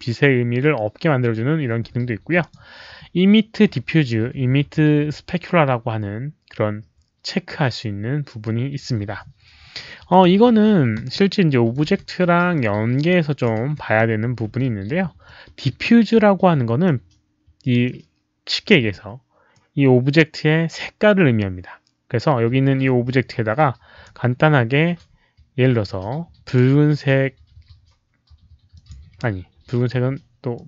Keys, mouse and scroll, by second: 2.3 click, 10.0 click, 10.9 r, 11.2 middle click, 11.9 w, 12.5 click, 13.5 r, 13.9 middle click, 14.4 w, 15.2 click, 16.8-17.8 middle drag, 18.8 q, 19.5-24.0 right drag, 26.4 click, 28.7 click, 30.5 click.